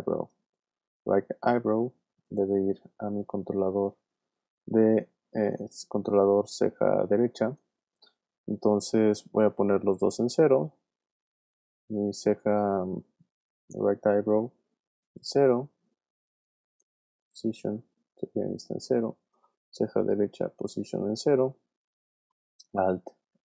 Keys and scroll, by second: 17.0 p, 20.2 p.